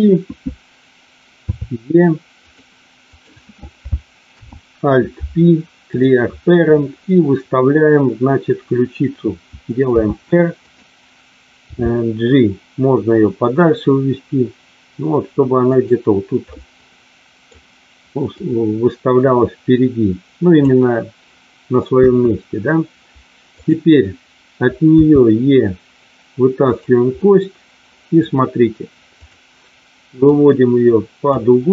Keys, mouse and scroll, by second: 1.4 e, 2.4 click, 4.2 alt+p, 9.9 r, 10.6 click, 11.7 g, 15.6 click, 16.5-17.5 middle drag, 18.2-20.5 drag, 22.0 KP_1, 24.9 e, 26.6 click, 27.1-28.2 middle drag, 29.1 click, 30.2-31.2 drag.